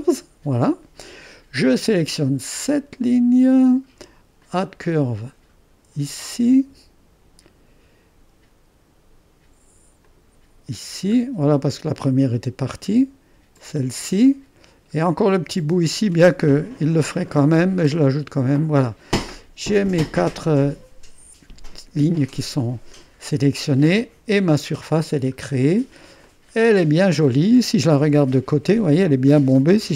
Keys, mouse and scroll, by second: 3.0 click, 4.4 click, 6.2 click, 10.1-11.2 drag, 12.4-13.6 scroll up 1, 13.6-15.0 drag, 15.0-15.5 scroll up 1, 15.5 click, 16.1-16.6 scroll up 1, 16.6-19.0 drag, 19.0-20.3 scroll down 1, 24.0-25.1 drag, 25.1-26.3 scroll down 1, 26.3-27.8 drag, 28.1 3, 29.8 1.